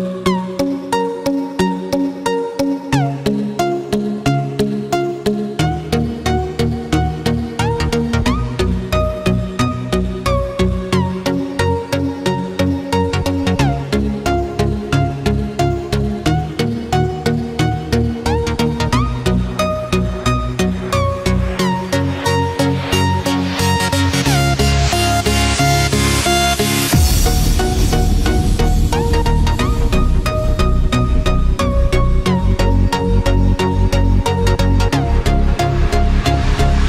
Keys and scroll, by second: 6.2 ctrl+-, 8.9 ctrl+-, 9.8 ctrl+0, 11.4 ctrl+=, 13.3 ctrl+-, 14.5 ctrl+=, 15.0 ctrl+-, 22.3 ctrl+=, 28.4 ctrl+-, 33.8 ctrl+=.